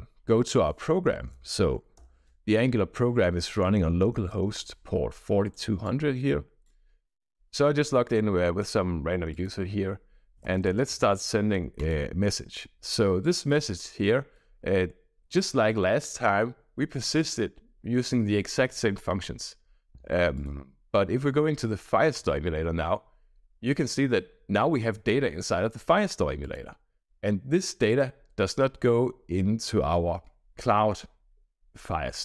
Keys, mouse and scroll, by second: 0.7-1.9 typing, 3.4 BackSpace, 4.0 h, 4.4 Return, 5.8 click, 7.8 click, 9.2 click, 10.0-11.5 typing, 11.7 click, 13.1 click, 13.6 click, 20.3 click, 22.0 click, 23.7-24.3 scroll down 2, 26.3 click, 27.8 drag.